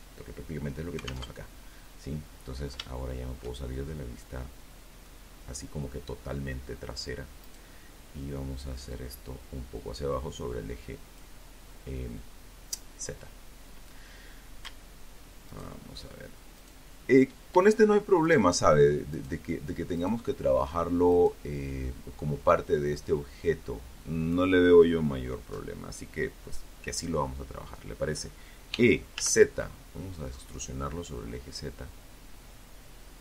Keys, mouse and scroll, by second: 0.0 middle click, 1.1 shift+middle click, 1.9-3.4 shift+middle drag, 5.6 right click, 6.7-9.5 drag, 13.7 alt+shift+right click, 14.7 alt+shift+right click, 16.4 shift+right click, 17.3 shift+right click, 18.1 shift+right click, 19.3 shift+right click, 26.9 e, 27.3 z, 31.6 click, 32.1 alt+Tab.